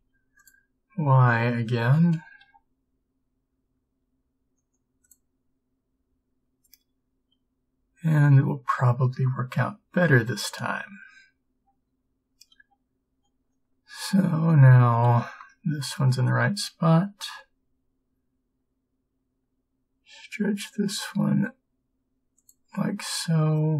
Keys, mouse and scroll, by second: 2.5 g, 17.3 b.